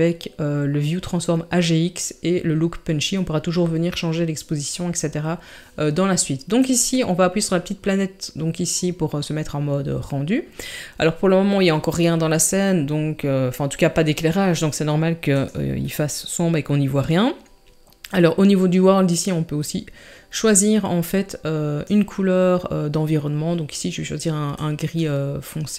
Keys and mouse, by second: 19.1 click.